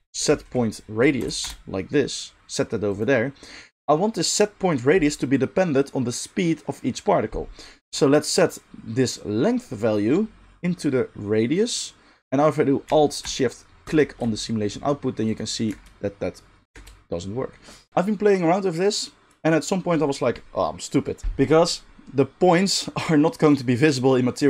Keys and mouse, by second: 1.6-2.9 middle drag, 7.3-12.8 right drag, 7.9-12.8 drag, 7.9-12.8 middle drag, 13.9-15.2 alt+shift+drag, 15.6 middle click, 15.6 space, 16.7 space.